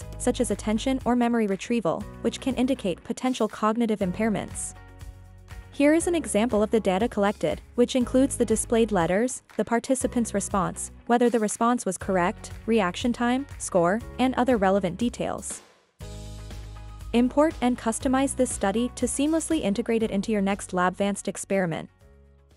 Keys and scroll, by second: 0.1-2.1 typing.